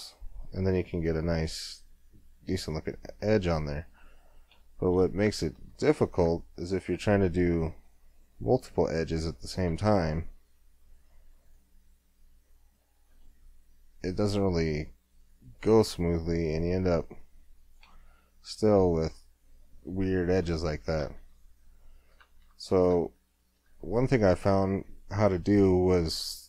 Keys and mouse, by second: 1.7-3.6 middle drag, 4.2-5.3 middle drag, 5.3 ctrl+z, 10.8 w, 11.2-14.0 middle drag, 18.0-19.9 middle drag, 21.0 ctrl+z, 22.3 ctrl+z, 22.9 Tab, 23.8 ctrl+z.